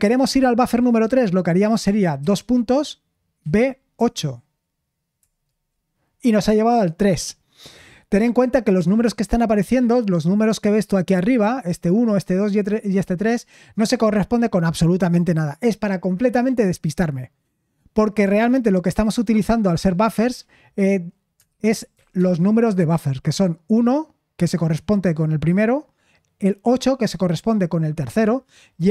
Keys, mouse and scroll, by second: 2.5 typing, 21.4-22.4 typing.